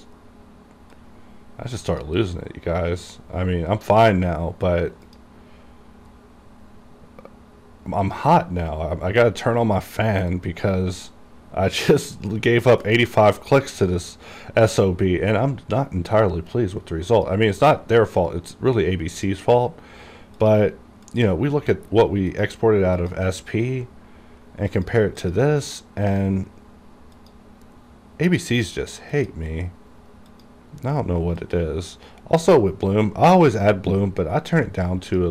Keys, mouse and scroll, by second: 1.1 click, 2.3 click, 4.5 scroll down 1, 5.2 click, 6.0-8.1 scroll down 1, 8.1 click, 10.4-12.7 drag, 12.7-14.7 scroll down 1, 15.2 scroll up 1, 17.3-35.3 drag.